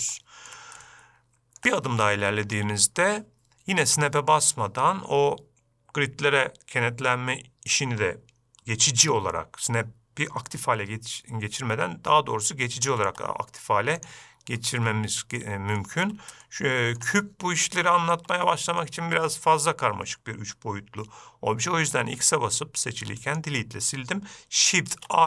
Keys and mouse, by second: 0.5-0.9 shift+middle drag, 1.2-2.0 ctrl+middle drag, 2.7 shift+middle drag, 13.2 shift+s, 14.9-15.8 middle drag, 16.1 shift+middle drag, 16.8-17.4 ctrl+middle drag, 18.2 shift+middle drag, 18.8 middle click.